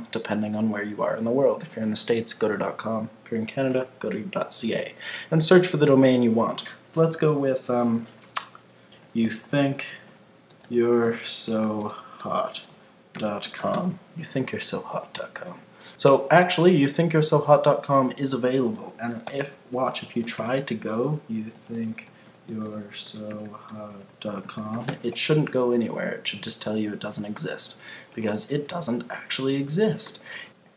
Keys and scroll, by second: 13.7 Return, 19.3 super+t, 24.9 Return.